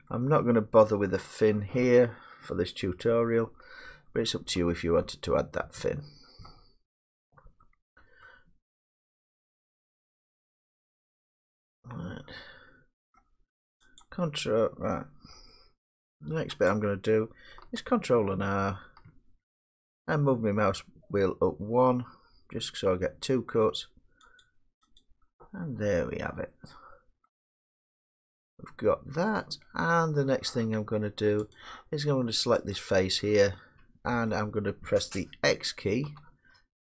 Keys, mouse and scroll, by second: 0.1 middle click, 1.3 middle click, 6.4 middle click, 8.3 middle click, 9.9-13.5 middle drag, 14.0 click, 16.2 middle click, 16.7 click, 18.6 ctrl+r, 21.5-22.5 scroll, 22.5-22.8 scroll, 24.4 click, 24.8 scroll down 3, 25.0 click, 27.2-27.7 scroll down 3, 30.0 middle click, 31.6 click, 32.9 click, 34.9 middle click, 36.0 x.